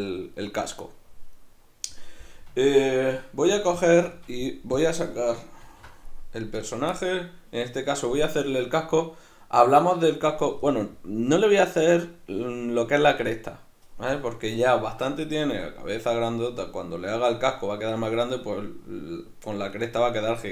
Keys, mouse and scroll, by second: 3.5 z, 4.7-5.7 drag, 5.7 alt+h, 6.6 right click, 6.9-20.5 middle drag.